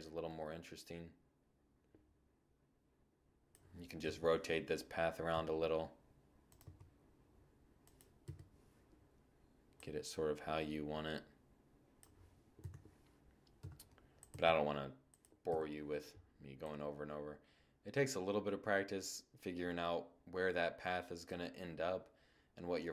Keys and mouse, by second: 2.7 KP_7, 4.0 r, 5.3 g, 6.6-10.1 drag, 6.9 KP_0, 11.2 7, 12.2 r, 12.7 click, 12.9 click, 12.9 g, 14.1 click, 14.1 KP_0, 14.5-16.9 drag, 22.1 shift+z.